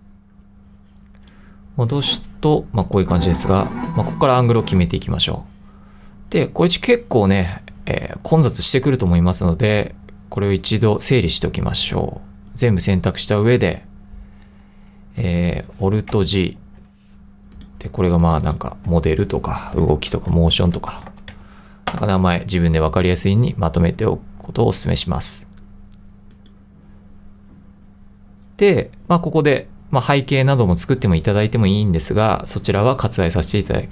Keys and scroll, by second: 16.6 alt+g, 19.6-21.9 typing, 21.9 Return.